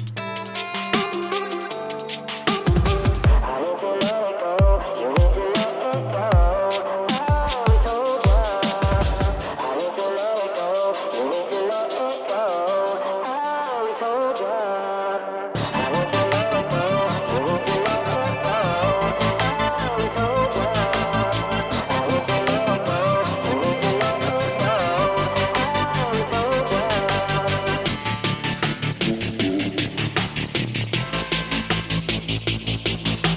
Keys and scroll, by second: 6.4 ctrl+shift+g, 8.0 f, 8.3 r, 8.3 e, 10.9-14.1 typing, 15.6 Return, 30.8 space.